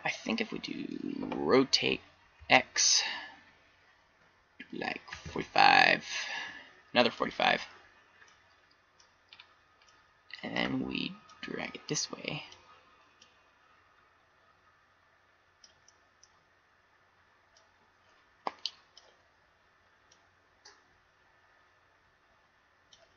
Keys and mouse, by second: 0.0 middle click, 1.4 r, 2.3-7.1 middle drag, 8.2-9.2 middle drag, 11.3-13.4 middle drag, 13.4-15.1 drag, 17.6-18.9 drag, 20.1 click, 22.9-23.1 middle drag.